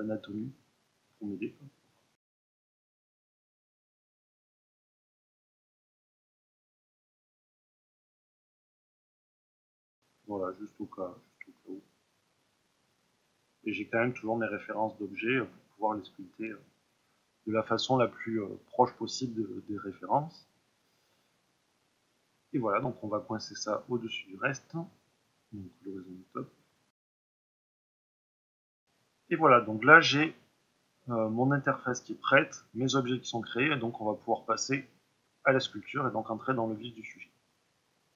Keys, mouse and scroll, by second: 0.0-28.0 drag, 28.0-38.1 middle drag, 28.4-29.5 scroll up 2, 29.5 scroll up 1.